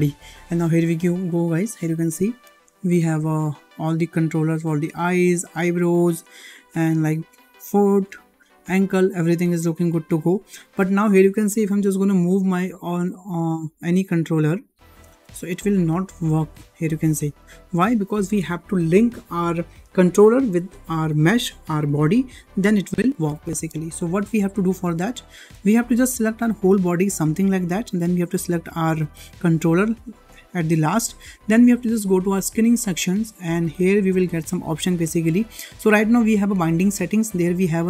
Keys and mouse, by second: 1.3 middle click, 2.6 shift+middle drag, 3.1-4.3 middle drag, 6.2 shift+middle click, 7.6 shift+middle click, 8.1-8.5 middle drag, 8.9-9.2 shift+middle drag, 9.4-10.1 middle drag, 10.4 shift+middle drag, 12.5-12.8 shift+middle drag, 13.6 middle drag, 14.2 click, 14.8 click, 15.2-15.5 shift+middle drag, 15.8 g, 24.1 ctrl+Tab, 25.2 shift+middle click, 26.6-27.4 drag, 30.1 shift+click, 31.0-31.5 shift+middle drag, 32.9 click, 37.7-37.8 drag.